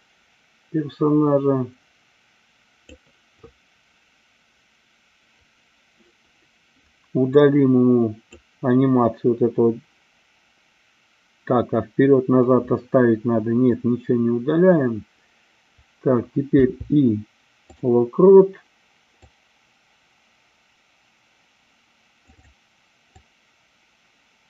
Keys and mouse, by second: 7.3 click, 19.2-22.3 drag, 22.4 click, 23.1-24.4 drag.